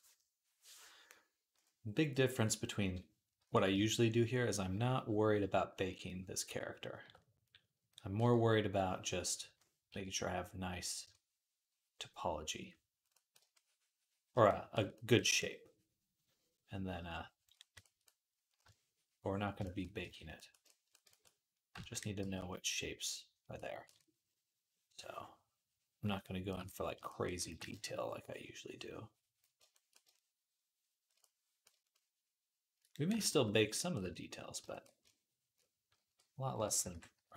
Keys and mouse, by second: 3.2 d, 3.8-15.2 shift+drag, 9.7 d, 11.4-21.1 middle drag, 21.1 click, 21.1 right click, 21.6-32.8 ctrl+middle drag, 22.0 v, 27.0-31.0 ctrl+drag, 27.0-31.0 ctrl+right drag, 35.3-37.3 drag, 35.3-37.3 middle drag, 35.3-37.3 right drag, 35.8-37.3 typing.